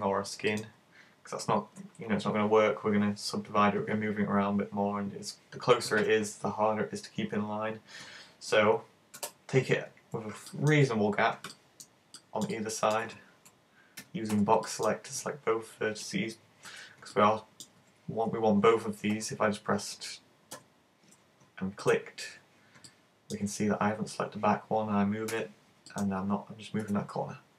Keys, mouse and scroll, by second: 0.6 click, 9.2 super+z, 10.0-10.7 scroll down 3, 10.5 shift+middle click, 11.0-11.7 scroll down 3, 11.5 shift+middle click, 12.2 shift+middle click, 12.5 shift+middle click, 14.0 super+a, 14.3 b, 17.1 middle click, 17.8 z, 20.5 super+KP_1, 21.8 right click, 22.9 middle click, 25.3 g, 26.0 click, 26.9 z.